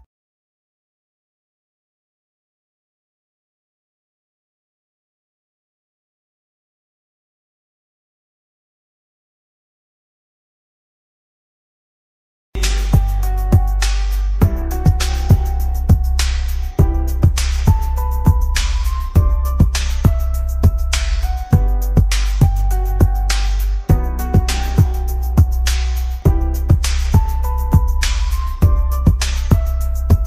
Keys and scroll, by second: 14.0 ctrl+v, 16.1 Escape, 23.3 x, 24.8 BackSpace, 26.1 shift+x, 27.5 shift+;, 27.9 space.